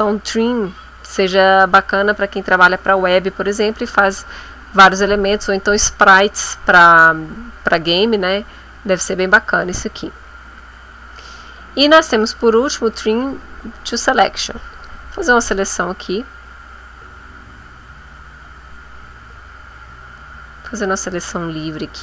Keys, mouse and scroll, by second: 9.6 click, 11.4 click, 14.7 click, 15.9-22.0 drag.